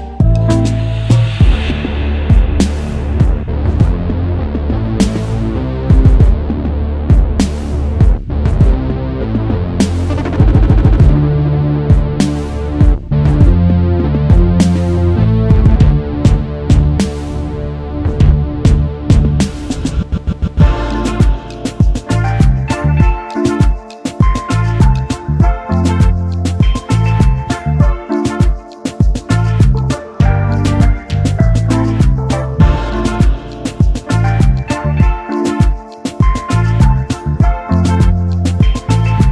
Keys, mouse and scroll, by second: 3.2 space, 3.2 double click, 4.5 alt+click, 9.4 alt+scroll down 1, 10.2-10.6 alt+scroll up 1, 10.6 space, 10.7 double click, 10.9 space, 12.9 space, 13.7 space, 15.2 alt+scroll down 1, 17.7-18.0 alt+scroll up 1, 19.2 alt+click, 20.3-20.9 alt+scroll down 1, 21.0 alt+scroll up 1, 21.6 space, 21.7 double click, 22.0 space, 23.2 alt+scroll down 1, 23.7 space, 30.7 typing, 32.0 typing, 34.0 double click.